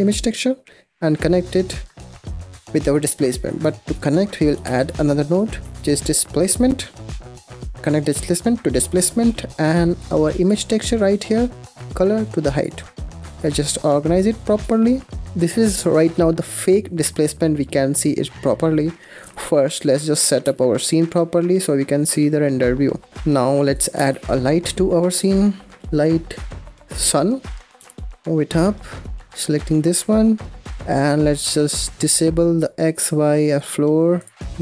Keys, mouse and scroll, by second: 1.0 click, 2.0-3.4 middle drag, 3.4 click, 4.0 middle drag, 4.3 click, 4.5 shift+a, 7.9 click, 8.7 scroll down 5, 8.9 middle click, 9.4 click, 10.0 middle click, 10.3 scroll up 1, 10.9 click, 13.7 click, 14.3 click, 15.0 scroll up 4, 15.8-17.0 middle drag, 17.0-17.3 scroll up 2, 17.3-17.8 scroll down 2, 17.8-19.1 middle drag, 19.1 click, 19.5-20.3 scroll down 2, 20.3 z, 22.6-23.0 scroll up 2, 23.0-23.6 scroll down 2, 23.6 click, 24.0 shift+a, 27.7 g, 28.9 scroll up 1, 29.1 click, 30.6 scroll down 2, 30.8 scroll up 5, 33.6 drag, 33.8 scroll down 3, 34.1 click.